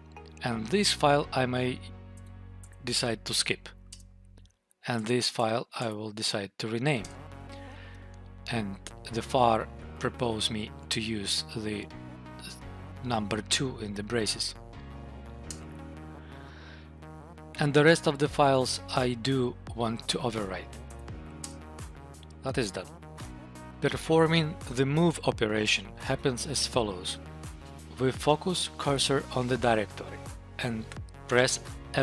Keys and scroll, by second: 2.3 Tab, 3.8 Return, 4.8 Tab, 6.9 Return, 9.7 Right, 10.0 Left, 12.2 Right, 13.7 Left, 14.0 Right, 15.5 Return, 20.9 Tab, 21.2 Return.